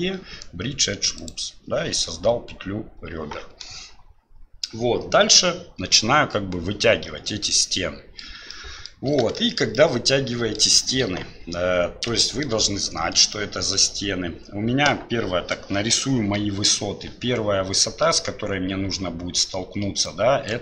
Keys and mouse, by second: 7.7 middle click, 8.7 middle click, 9.5 shift+middle click, 9.9 middle click, 11.0 KP_1, 12.2 shift+middle click, 13.3 shift+middle click, 20.2-20.6 drag.